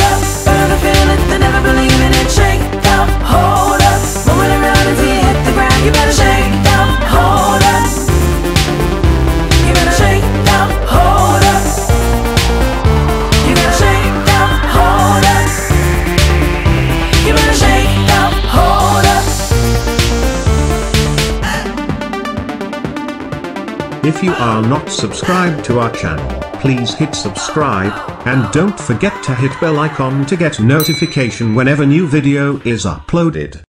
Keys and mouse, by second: 1.8 click, 3.5 click, 5.8 click, 8.1 click, 8.2 click, 9.7 click, 13.3 click, 14.8 click, 14.9 click, 17.2 click, 18.5 click, 19.4 click, 22.7 click.